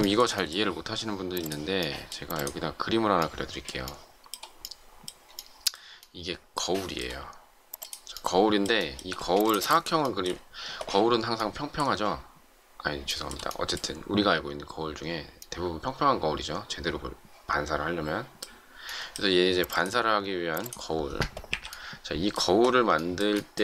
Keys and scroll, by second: 9.1 shift+space, 21.4 Delete.